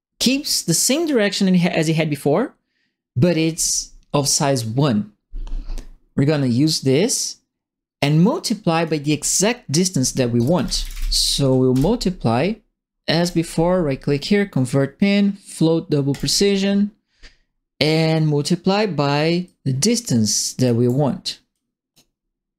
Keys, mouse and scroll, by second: 8.2 click, 10.1-11.4 typing, 11.7 Return, 13.2 right click, 16.1 click, 19.4-20.6 drag, 21.5 click.